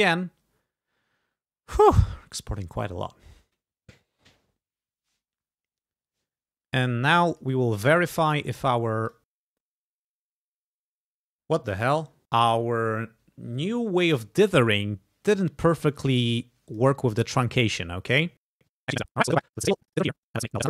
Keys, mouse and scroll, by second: 2.6 click, 7.4 click, 8.2 click, 9.2 click, 16.7 click, 18.8 click, 19.6 click, 19.8 click.